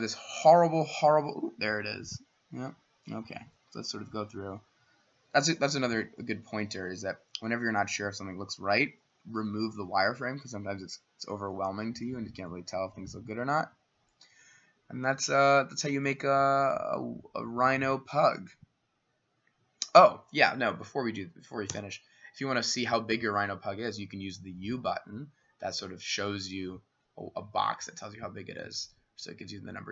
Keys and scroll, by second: 21.7 u.